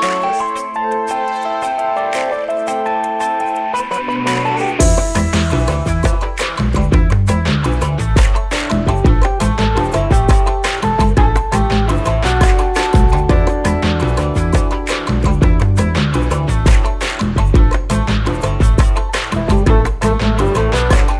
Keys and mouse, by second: 0.9-2.4 drag, 6.4-9.1 typing.